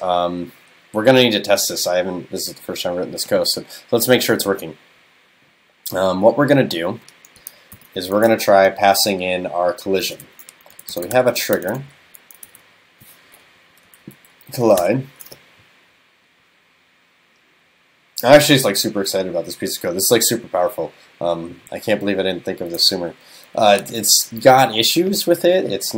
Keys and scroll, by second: 7.8 super+..